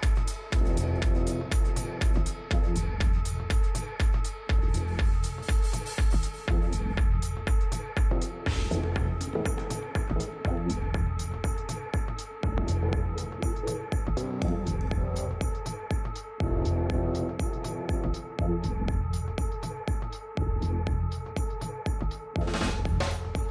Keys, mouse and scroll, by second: 0.3 b, 2.4-4.3 drag, 4.6 a, 6.0 b, 7.6-9.3 drag, 11.6 a, 12.1 middle click, 13.8 a, 14.1 a, 14.9 b, 17.1-19.0 drag, 22.7 a.